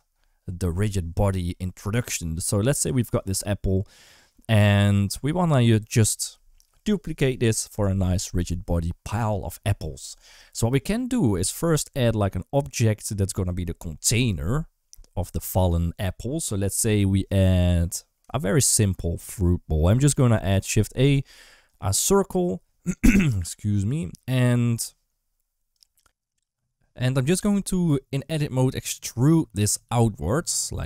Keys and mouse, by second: 18.3 shift+a, 24.2 Tab, 27.3 right click, 29.4 e.